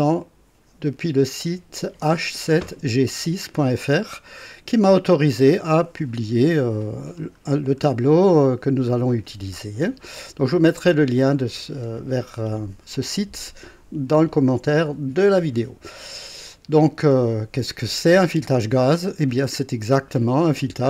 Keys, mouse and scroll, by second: 0.2 click, 7.1 scroll down 2, 7.8 scroll down 2, 8.9 scroll up 2, 16.1 scroll down 1, 16.9 scroll up 2.